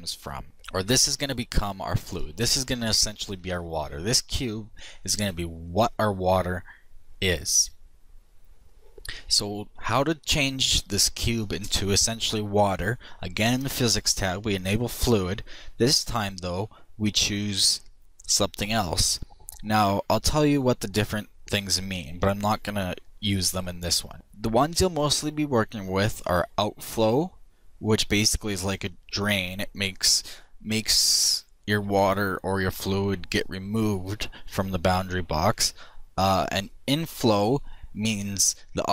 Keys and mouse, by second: 2.9-4.8 middle drag, 6.0 middle click, 7.5-11.4 middle drag, 13.8-17.2 drag.